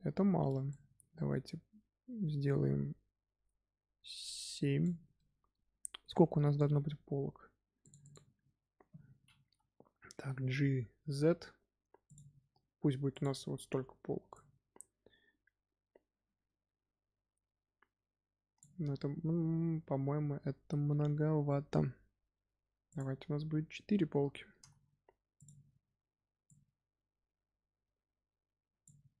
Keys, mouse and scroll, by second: 0.6-3.8 drag, 5.1-7.7 middle drag, 7.7-10.1 drag, 10.1 g, 13.0-17.4 drag, 22.8-24.5 drag, 24.5 g, 26.4-29.2 drag.